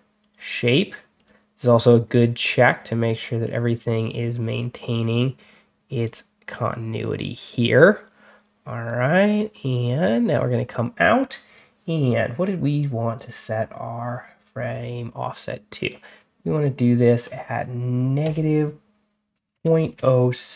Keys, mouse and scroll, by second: 0.1 click, 1.0 click, 2.9 click, 4.4 click, 5.8 click, 8.7-10.3 drag, 13.0 click, 15.7-17.1 drag, 18.1 -, 19.4 ., 19.8 0.